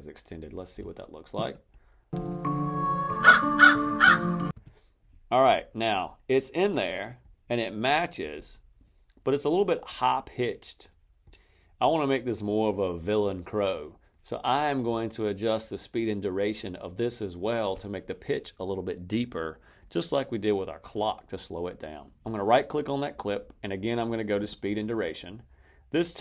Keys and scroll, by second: 2.0 space, 4.4 space.